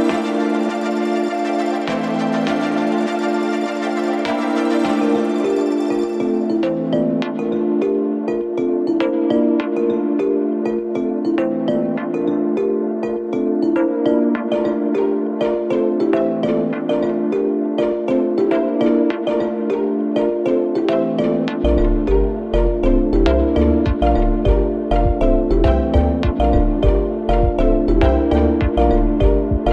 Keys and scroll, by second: 4.0 ], 5.3 4, 6.4 3, 6.9 ], 12.0 ctrl+z, 12.7 0, 12.9 Return, 13.4 1, 13.8 Return, 14.0 ctrl+z, 14.7 1, 14.9 Return, 19.4 ,, 24.4 ctrl+d, 24.6 Escape, 24.9 ,.